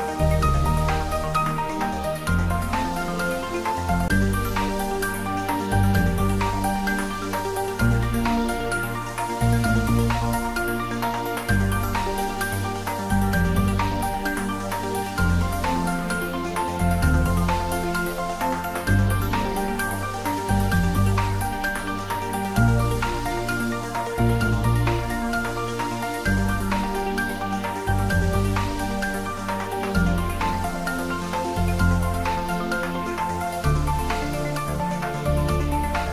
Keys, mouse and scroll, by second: 0.4 scroll up 1, 1.4 click, 1.9-2.3 scroll down 1, 2.3 middle click, 3.2 scroll up 1, 5.2 click, 6.2-6.6 scroll up 1, 8.0 scroll up 1, 8.1-9.9 middle drag, 9.9 ctrl+z, 10.5 click, 11.4 Tab, 12.0 click, 12.6 Tab, 13.4 click, 13.9 Tab, 16.2 ctrl+z, 17.2 ctrl+z, 20.0 click, 21.0 Tab, 21.7 Tab, 22.1 click, 22.6-22.9 scroll down 1, 22.9 Tab, 23.4 middle click, 24.2 scroll down 1, 24.9-25.6 scroll down 1, 25.6 click, 27.0 middle click, 28.1 ctrl+z, 32.7 click, 33.5 scroll down 1, 34.4-34.7 scroll down 1, 34.7 click, 35.5 scroll up 1.